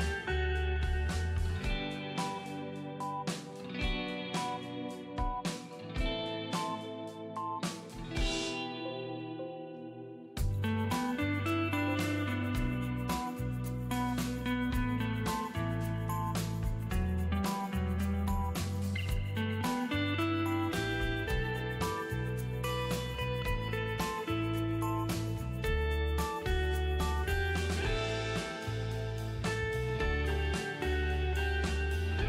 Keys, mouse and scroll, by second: 0.2 click, 4.4 space, 4.7 right click, 4.9 click, 5.1 space, 5.6 ctrl+space, 5.8 ctrl+click, 6.1 ctrl+space, 6.8 click, 7.1 space, 7.9 alt+i, 8.1-9.2 typing, 11.4 alt+a, 11.7 alt+f, 13.2-20.5 drag, 20.5-21.2 scroll down 1, 23.0-25.8 drag, 25.8 ctrl+d, 27.0 v, 27.6 space, 27.8 ctrl+click, 28.8 right click, 29.0 click.